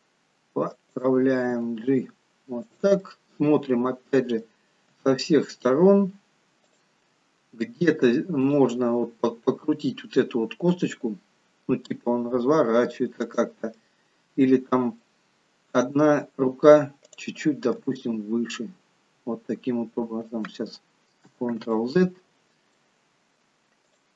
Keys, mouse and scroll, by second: 3.1 middle click, 5.1 g, 8.5 click, 9.2-9.8 scroll down 4, 9.7 middle click, 12.1 r, 13.8 middle click, 15.4-16.0 scroll up 4, 16.4 scroll down 1, 17.2 click, 17.9 g, 21.9 ctrl+z, 22.8 middle click, 24.0 click.